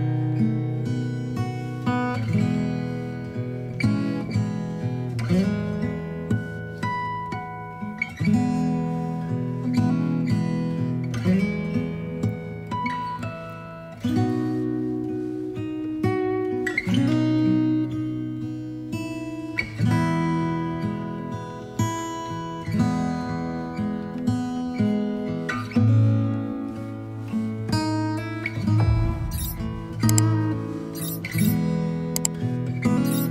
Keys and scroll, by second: 19.7 b, 20.3 alt+b, 29.5 ctrl+j, 29.9 v, 31.0 ctrl+t.